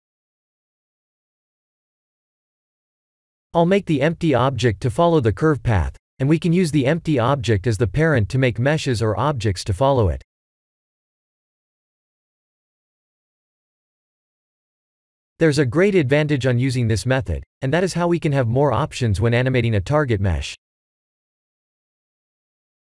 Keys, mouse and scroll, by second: 3.5-4.7 drag, 6.5-8.6 drag, 10.6 click, 11.2 click, 13.8 click, 16.3 a, 21.5 a, 21.8 click, 22.7 click.